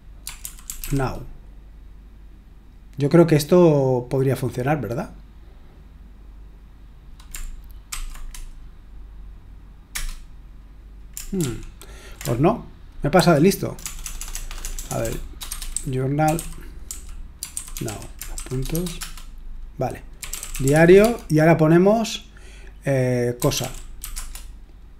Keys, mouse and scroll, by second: 0.0-1.3 typing, 7.9 typing, 9.9 Return, 11.4 ctrl+p, 13.2 alt+f, 13.8-18.7 typing, 19.0 Return, 19.9-21.2 typing, 23.1-24.5 typing.